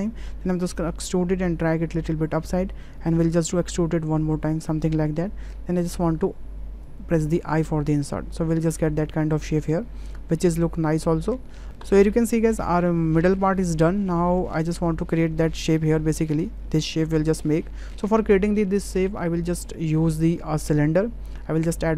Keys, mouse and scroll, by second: 3.3 e, 6.8 i, 7.6 click, 7.9 Tab, 8.5-11.2 middle drag, 11.9 shift+middle click, 12.1-12.5 middle drag, 15.7 shift+middle click, 17.6 middle drag, 19.6 `, 21.6 shift+a.